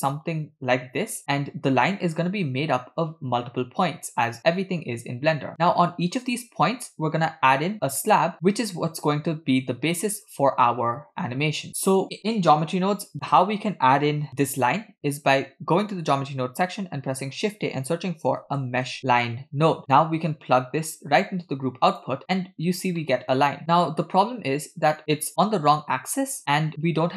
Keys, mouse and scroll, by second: 2.4 click, 3.1 click, 3.8 click, 4.4 click, 5.0 click, 5.6 click, 6.1 click, 7.5 click, 8.2 click, 8.9 click, 9.6 click, 10.0 click, 10.7 click, 11.1 click, 11.7 ctrl+click, 14.4 w, 16.5 shift+a, 21.1-22.1 drag, 22.6-23.0 scroll down 2, 23.0 middle click, 23.5-24.1 scroll down 1, 24.1 scroll down 1, 24.2-24.7 scroll up 1, 24.7 scroll up 1, 26.4 shift+middle click.